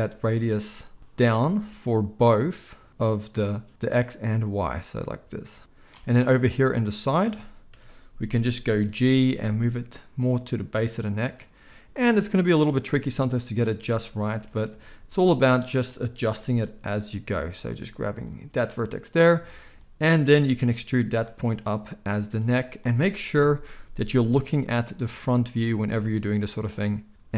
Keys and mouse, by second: 1.8-11.3 drag, 7.7 KP_3, 9.2 g, 11.3-15.7 middle drag, 14.8 z, 15.7 click, 16.3 g, 17.8 z, 19.1 click, 20.6 e, 23.3 KP_1, 25.2-26.5 middle drag, 25.4 z, 26.5-27.3 drag, 27.1 ctrl+a.